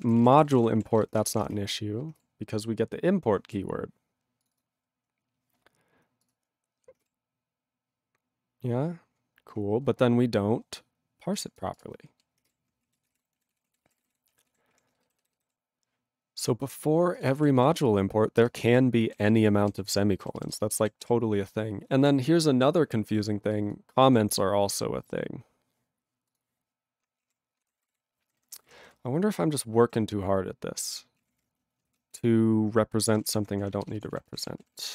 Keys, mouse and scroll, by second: 0.0 ctrl+p, 0.1 ctrl+space, 0.1 ctrl+e, 0.2 ctrl+n, 0.3 ctrl+e, 0.4 ctrl+n, 0.5 ctrl+e, 0.5 ctrl+g, 1.0 ctrl+s, 2.3 ctrl+s, 3.0-4.4 scroll down 1, 4.4 click, 4.5 click, 4.5 double click, 4.6 double click, 5.0 scroll up 1, 6.2 click, 6.3 click, 12.5 click, 12.9 ctrl+a, 13.0 ctrl+space, 13.1 ctrl+e, 13.1 ctrl+g, 13.5 ctrl+s, 13.7 ctrl+p, 13.8 ctrl+space, 13.8 ctrl+e, 14.0 ctrl+n, 14.0 ctrl+e, 14.1 ctrl+g, 14.5 ctrl+s, 14.7 ctrl+p, 15.2 alt+b, 17.2 ctrl+e, 17.3 ctrl+g, 17.6 ctrl+b, 18.4 ctrl+space, 18.8 ctrl+alt+b, 19.7 ctrl+g, 19.9 ctrl+n, 20.2 ctrl+b, 20.5 ctrl+space, 20.9 ctrl+alt+b, 21.0 ctrl+g, 22.8-23.5 scroll down 1, 23.5 click, 24.1 alt+w, 24.9 scroll up 1, 26.3 click, 26.4 click, 27.3 ctrl+a, 27.6 ctrl+space, 27.6 ctrl+e, 27.6 ctrl+n, 27.8 ctrl+e, 27.8 ctrl+g, 28.2 ctrl+n, 30.0 ctrl+p, 31.2 ctrl+a, 31.3 ctrl+o, 31.3 Tab, 31.9-34.9 typing.